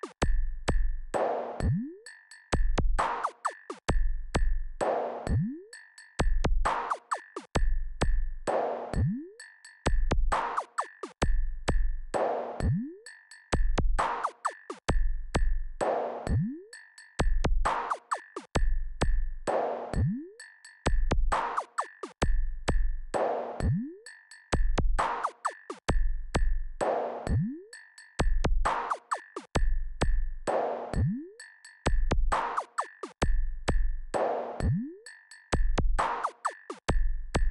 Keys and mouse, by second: 5.1 ctrl+KP_6, 5.3 ctrl+KP_6, 5.6 ctrl+KP_6, 6.6 KP_6, 6.8 KP_6, 6.9 KP_6, 8.5 KP_4, 8.7 KP_4, 9.2 KP_4, 25.7-30.6 drag, 33.1 ctrl+KP_4, 33.3 ctrl+KP_4, 33.5 ctrl+KP_4, 33.6-34.0 ctrl+KP_4, 34.7 KP_4, 34.9 KP_4, 35.4 KP_4.